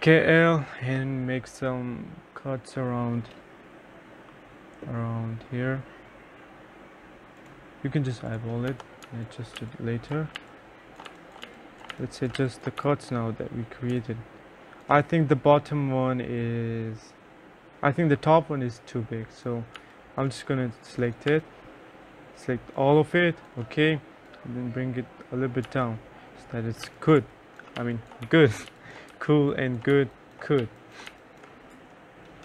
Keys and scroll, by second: 8.8 F1, 9.1 3, 9.6 2, 10.9-14.0 typing, 19.8 3, 25.8 3, 26.9-31.2 typing, 31.8 F1.